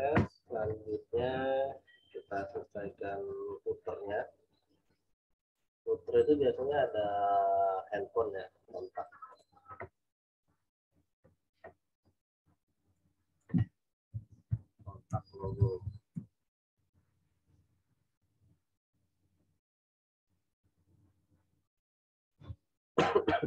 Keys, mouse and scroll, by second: 9.3 click, 10.0-10.8 scroll up 1, 12.9 click, 14.1-16.5 typing, 18.6 scroll down 1, 19.3 scroll up 1, 20.8 scroll down 1.